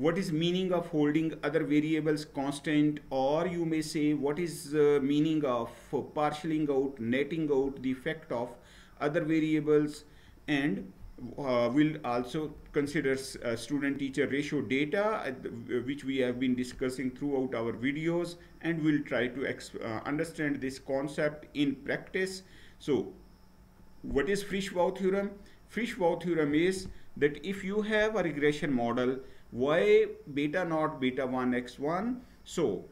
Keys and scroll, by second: 3.4 Right, 10.3 Right, 24.5 Right.